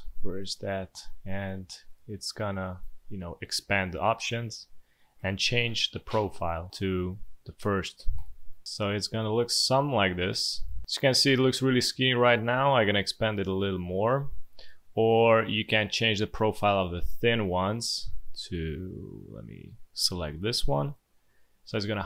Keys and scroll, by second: 8.8 space, 9.5 alt+space, 10.3 space, 11.2 space.